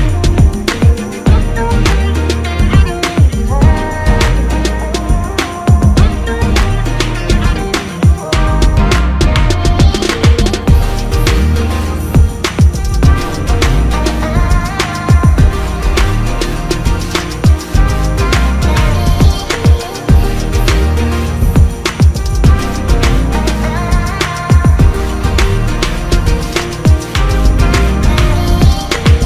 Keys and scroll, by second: 4.6 ctrl+x, 7.6 ctrl+f, 15.7 ctrl+s, 24.1 alt+space.